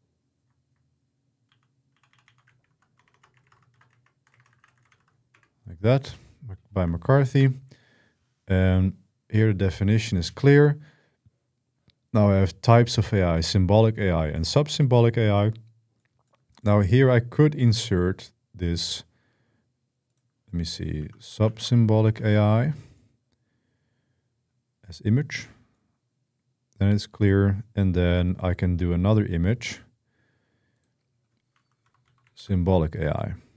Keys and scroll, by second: 1.2 Right, 1.7 Right, 1.9 Right, 2.0-5.2 typing, 20.5-21.8 typing, 31.0-32.6 typing.